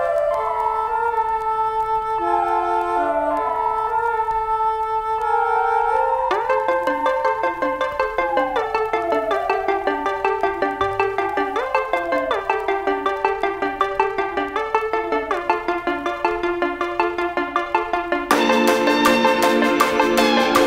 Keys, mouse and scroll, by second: 8.7 shift+Up, 15.0-20.6 shift+drag.